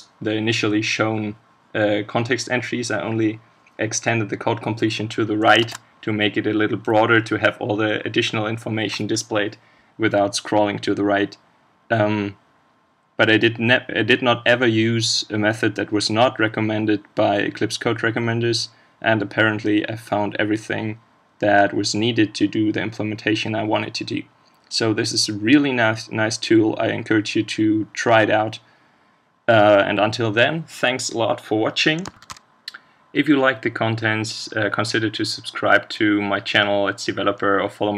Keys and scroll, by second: 5.6 ctrl+space.